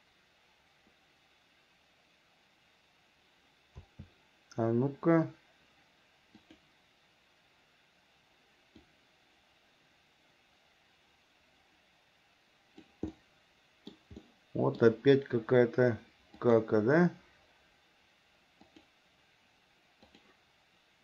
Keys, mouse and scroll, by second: 4.1 a, 6.7 click, 9.1-13.2 drag, 13.3 middle click, 14.4 middle click, 16.6 click, 18.9 click, 20.3 click.